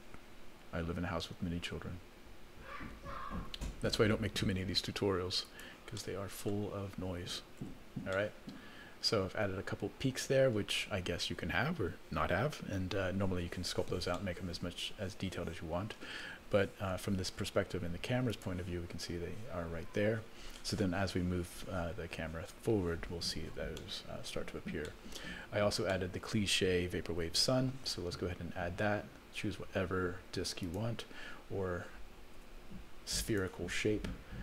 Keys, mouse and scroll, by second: 7.6 Tab, 8.1-10.5 middle drag, 14.1-16.0 middle drag, 16.9 KP_0, 18.3 click, 23.8 middle click, 24.4-24.9 scroll down 3, 24.9 middle click, 25.5-25.9 scroll down 2, 25.9 middle click, 27.0 ctrl+s, 27.3 shift+a, 32.4 s.